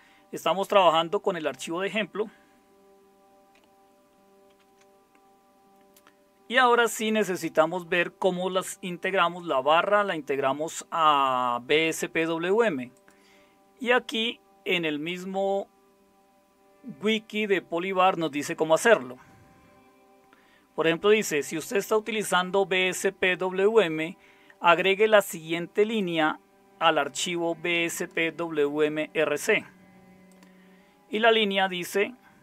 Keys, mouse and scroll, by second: 4.5 ctrl+x.